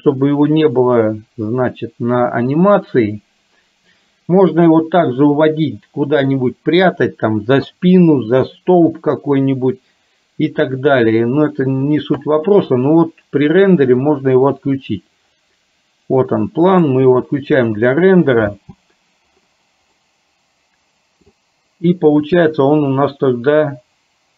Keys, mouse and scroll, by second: 16.9 click, 18.7 space, 20.2-21.4 middle drag.